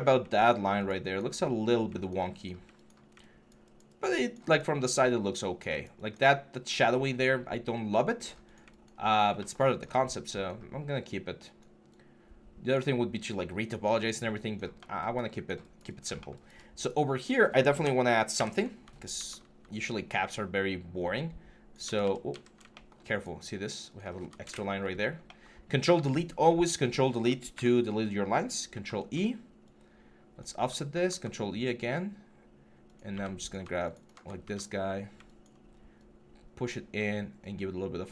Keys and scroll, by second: 1.3 3, 18.1 ctrl+F11, 18.9 ctrl+e, 21.6 ctrl+z, 24.2 ctrl+F11, 27.3 ctrl+F11, 28.5 ctrl+e, 30.7 ctrl+e, 32.9 q, 33.7 shift+q, 34.2 ctrl+e.